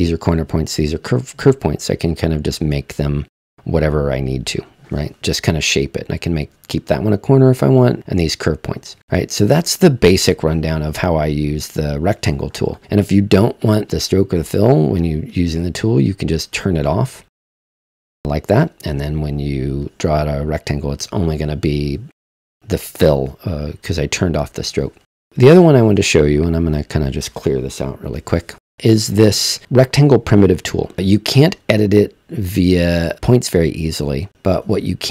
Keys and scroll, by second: 29.0 BackSpace.